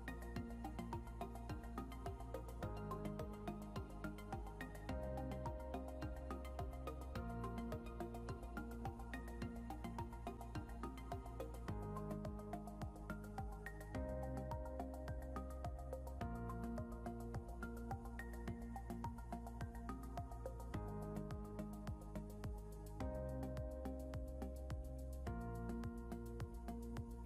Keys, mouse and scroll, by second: 0.4 scroll down 1, 1.1 scroll up 1, 1.6 scroll down 1, 5.8 scroll up 1, 15.2 double click, 17.7 scroll, 19.1 scroll down 1, 24.1 scroll up 1, 25.3-26.1 scroll up 1, 26.9 scroll.